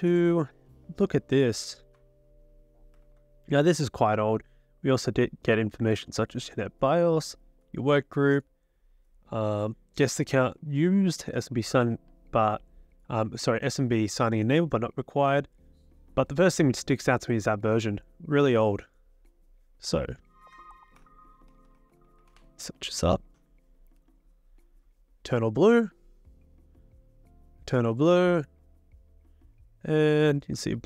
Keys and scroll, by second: 3.0 ctrl+c, 20.4 ctrl+v, 21.0-22.8 typing.